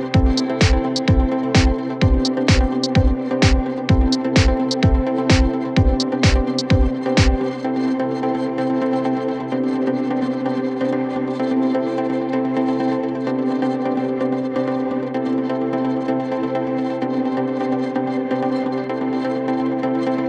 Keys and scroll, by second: 2.7 ctrl+z, 3.2 Escape, 14.6 F3, 14.9 Escape, 16.2 ctrl+z, 18.2 shift+F2, 18.5 Escape, 19.5 F10.